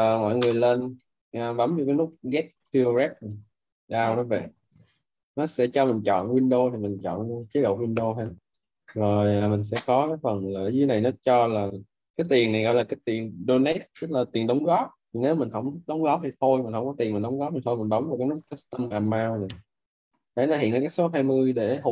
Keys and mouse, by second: 6.6 click, 21.7 click.